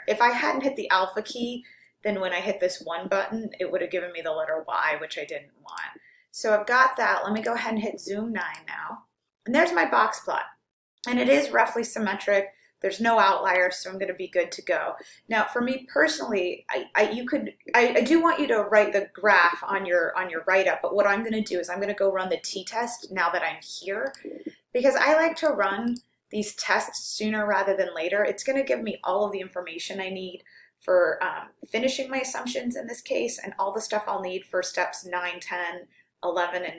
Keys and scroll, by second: 5.8 Return, 8.5 9, 25.4 Right, 26.0 Right.